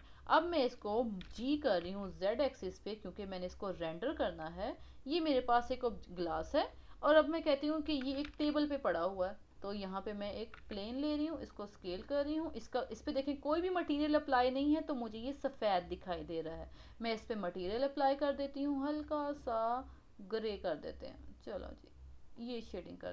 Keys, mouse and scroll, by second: 0.0 scroll up 1, 1.2 g, 3.8 scroll down 3, 4.2-5.9 middle drag, 5.9-6.2 scroll up 1, 6.2-8.2 middle drag, 8.2 shift+a, 10.6 s, 11.7 scroll down 4, 12.0-15.6 middle drag, 16.7-17.7 drag.